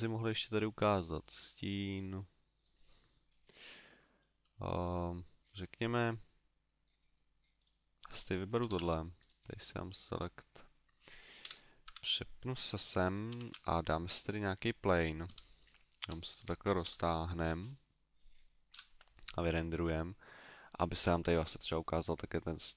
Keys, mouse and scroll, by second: 0.4 scroll down 1, 1.2 click, 1.5 click, 2.1 middle click, 4.2 middle click, 4.8 Tab, 5.5 right click, 7.5 right click, 8.6 shift+s, 11.4 KP_7, 11.8 Tab, 13.3 shift+a, 15.2 s, 15.6 click, 16.0 s, 16.4 click, 16.8 KP_0.